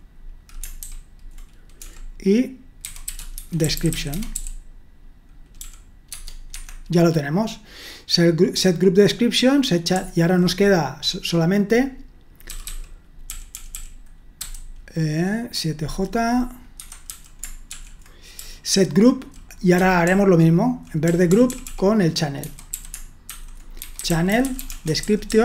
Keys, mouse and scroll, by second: 0.8-1.8 typing, 2.8-4.4 typing, 5.6-6.5 typing, 13.1-14.4 typing, 17.1-20.8 typing, 22.4-25.4 typing.